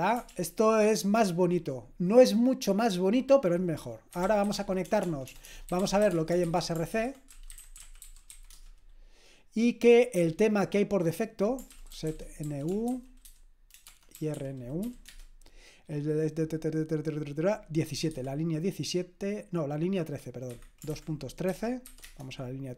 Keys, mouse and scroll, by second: 0.3 ctrl+l, 3.9-8.8 typing, 10.1 j, 11.7-15.1 typing, 17.8 typing, 20.5 Escape, 20.9-22.4 typing.